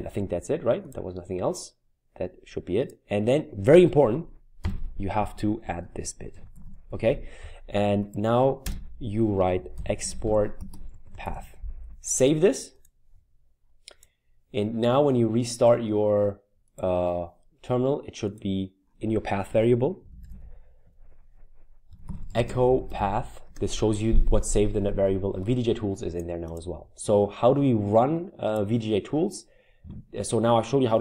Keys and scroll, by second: 4.6 typing, 5.8-7.1 typing, 8.6 Return, 9.2-11.8 typing, 13.1-13.8 typing, 20.3 ctrl+alt+t, 21.7-23.4 typing.